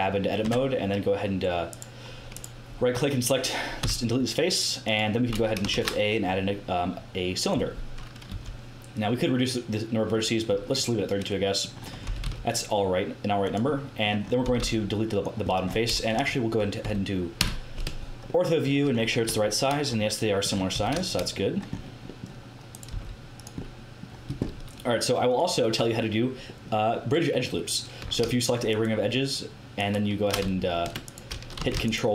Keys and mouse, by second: 0.4 Tab, 3.7 x, 5.6 shift+a, 8.2 t, 12.0 g, 14.4 g, 16.1 KP_7, 16.8 z, 17.3 KP_5, 20.7 z, 22.7 click, 22.9 x, 26.1-27.1 drag, 27.1-28.6 middle drag, 28.6-31.5 drag, 31.5 a.